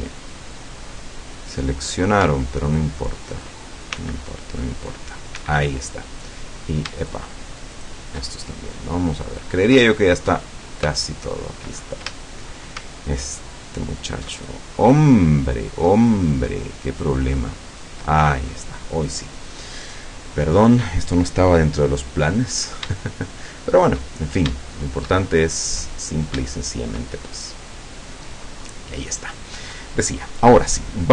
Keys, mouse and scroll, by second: 2.7 alt+shift+right click, 4.0 c, 4.7 middle click, 5.4 Escape, 6.0 scroll down 1, 7.0 shift+right click, 7.8 shift+right click, 8.3-9.2 shift+scroll down 6, 9.6 middle click, 10.6 scroll up 1, 11.0 shift+middle click, 11.8-12.1 shift+scroll up 1, 12.2 shift+middle click, 13.3 alt+shift+right click, 14.4 alt+shift+right click, 14.8 alt+shift+right click, 16.0 shift+right click, 16.9 shift+right click, 17.7 shift+right click, 18.2-19.2 shift+scroll down 3, 19.4 middle click, 20.1 scroll down 1, 20.9 scroll up 1, 21.4-21.7 scroll down 1, 22.3 middle click, 23.1-24.2 shift+middle drag, 24.6 shift+middle click, 25.4-25.8 shift+scroll up 1, 26.1-26.4 scroll down 2, 26.6 shift+middle click, 27.5-29.6 shift+middle drag.